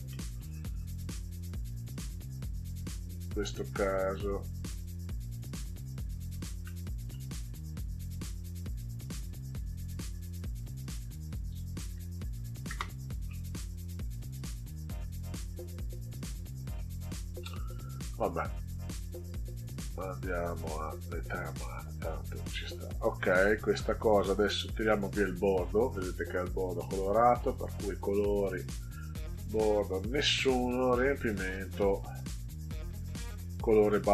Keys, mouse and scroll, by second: 0.0 middle click, 3.8-5.3 drag, 6.6 middle click, 10.5 click, 12.4 Delete, 12.6 BackSpace, 13.2 middle click, 16.7-17.4 middle drag, 18.2 ctrl+scroll up 2, 19.8-21.0 drag, 21.6 click, 22.8 click, 23.7 ctrl+scroll down 2, 27.4 click, 28.9 click, 31.7 click, 33.0 click.